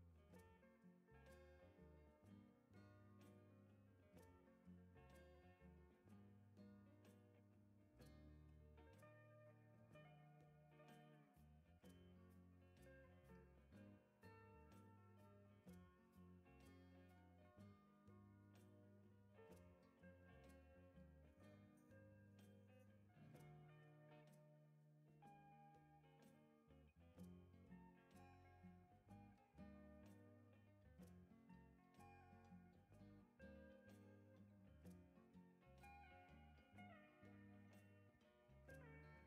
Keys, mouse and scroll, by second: 2.8 click, 3.2-4.1 scroll up 4, 5.4 click, 8.4 click, 9.3 right click, 11.2 click, 11.5-12.0 scroll down 4, 13.5 ctrl+click, 13.9-14.3 right drag, 16.7 click, 17.9-19.7 typing, 20.8-21.3 scroll up 4, 22.3 click, 24.6 click, 25.0-26.4 typing, 27.7 click, 28.4 click, 30.4 click, 34.2 click, 34.5-35.0 scroll down 3, 35.0 right click, 36.7 click, 37.0 scroll down 1, 37.4 right click.